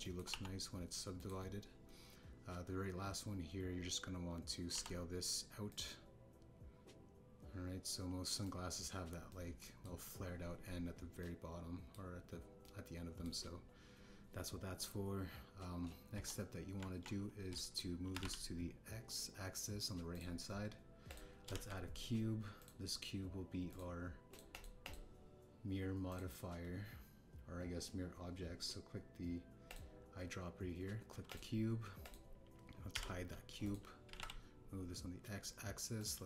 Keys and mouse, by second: 0.7 click, 1.0 shift+middle click, 1.2 e, 5.7 s, 6.6 click, 6.8-9.4 drag, 10.2 middle click, 12.2 middle click, 13.6 middle click, 17.1 KP_1, 17.7 Tab, 19.1 g, 19.1 x, 21.1-22.1 drag, 22.5 shift+a, 24.7 click, 25.2 click, 25.5 click, 25.8-27.1 drag, 33.0 click, 33.9 h, 34.6 click, 35.0 g, 35.1 x.